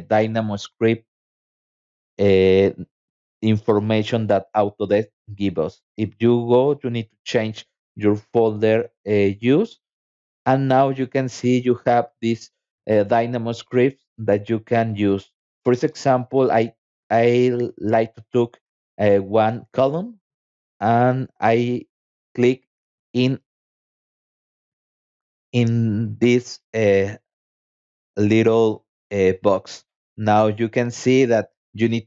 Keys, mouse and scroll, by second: 0.8 click, 2.4 click, 3.8 click, 4.8 scroll down 1, 5.3 scroll up 1, 6.3 click, 14.6 middle click, 15.1-15.4 scroll up 2, 15.8 scroll down 2, 16.4 middle click, 17.0 click, 23.7 click.